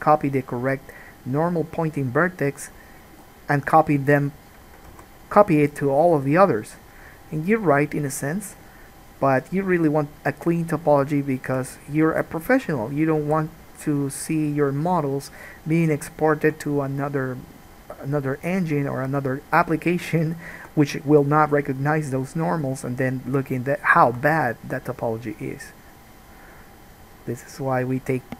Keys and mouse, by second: 3.0 middle click, 3.0 right click, 3.3 g, 3.9-14.6 right drag, 4.4 click, 4.4 middle click, 5.1 alt+a, 11.0 click, 11.0 middle click, 11.6 shift+click, 11.6 shift+middle click, 12.4 g, 13.5 alt+a, 14.6-19.6 drag, 19.6-22.0 right drag, 21.9 click, 21.9 middle click, 22.0 click, 23.5-27.8 drag, 23.5 g, 24.5 alt+a, 27.8-28.3 right drag.